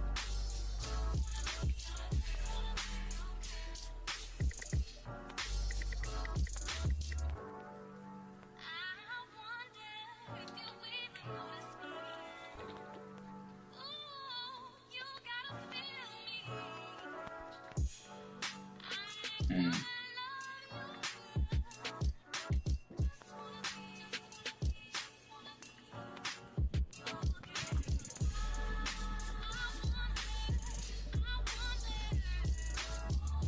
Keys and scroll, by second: 0.8 space, 1.9 ], 3.7 ctrl+z, 6.7 ctrl+z, 10.7-13.4 typing, 15.7 x, 16.4 ctrl+z, 22.0 b, 25.3-26.6 typing, 28.1 ctrl+z, 31.8 ctrl+z.